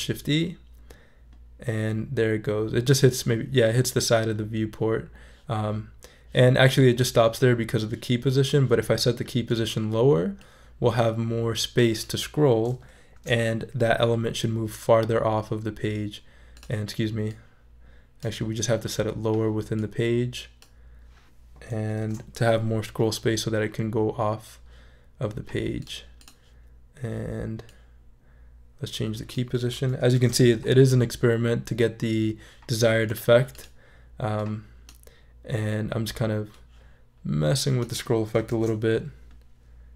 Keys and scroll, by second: 13.1 shift+super+e, 22.0 shift+super+e, 30.1 shift+super+e, 38.5 shift+super+e.